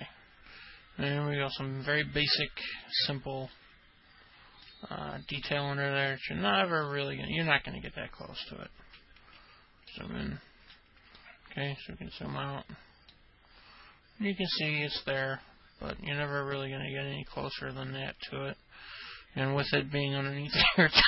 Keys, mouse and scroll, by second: 0.0-2.9 alt+middle drag, 3.7-4.7 alt+middle drag, 7.0 alt+middle click, 10.1 alt+middle click, 11.3-12.4 ctrl+alt+middle drag, 13.3-19.9 alt+middle drag.